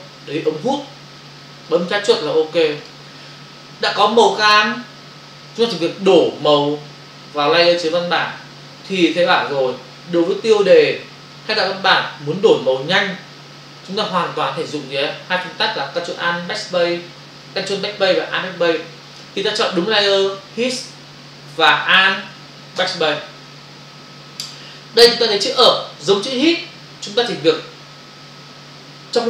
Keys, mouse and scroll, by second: 1.7 click, 22.8 alt+BackSpace.